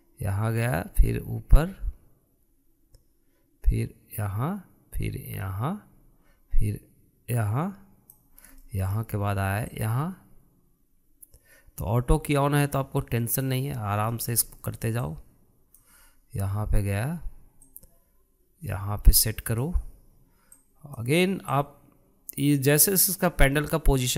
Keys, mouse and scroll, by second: 9.7-10.8 shift+middle drag, 10.8-13.8 drag, 15.2-16.3 shift+middle drag, 16.3-18.8 drag, 21.7-24.1 drag.